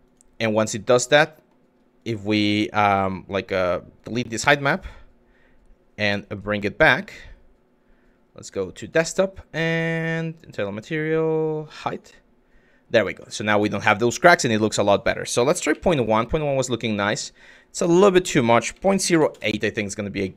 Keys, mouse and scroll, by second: 0.8 click, 1.6 click, 1.9 click, 3.6 click, 6.2 click, 12.9 middle click, 14.1 click, 14.5-15.6 drag, 16.6 click, 17.7-19.1 drag, 20.0 middle drag.